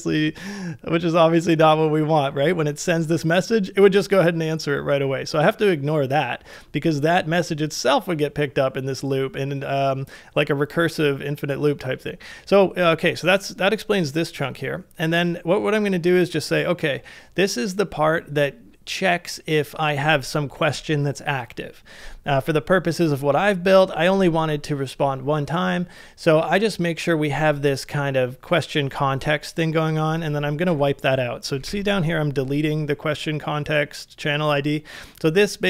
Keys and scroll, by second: 30.7 shift+8, 31.1 shift+8, 31.6 shift+v.